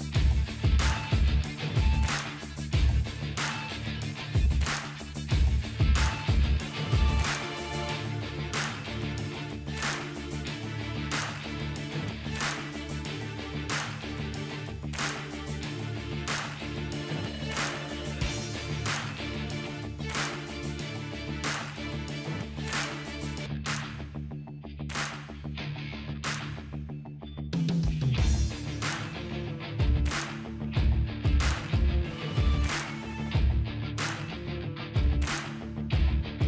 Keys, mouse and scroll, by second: 0.2-1.6 drag, 2.5-4.2 scroll up 1, 7.2 click, 9.8 ctrl+scroll up 1, 10.5 ctrl+scroll up 1, 12.6-21.2 drag, 25.1-28.5 typing, 27.7 click, 28.8-29.7 drag.